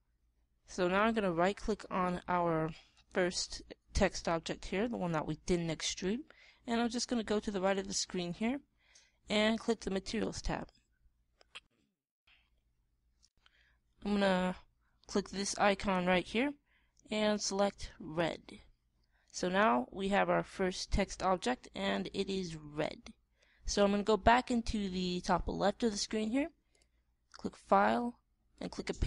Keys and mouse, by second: 7.0-10.6 middle drag, 10.6-12.4 drag, 16.3-18.2 drag.